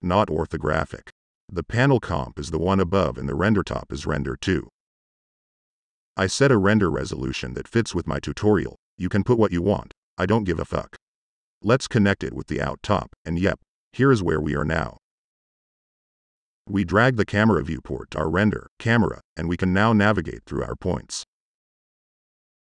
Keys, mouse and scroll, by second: 1.8 drag, 3.4-3.8 drag, 7.1 click, 12.2-12.7 drag, 12.9-13.5 drag, 14.6-15.1 drag, 15.6-16.2 middle drag, 17.7-18.0 drag, 19.2 middle click, 19.9 middle click, 20.1 right click, 21.0-21.3 right drag, 21.4-21.7 drag, 21.7 right click.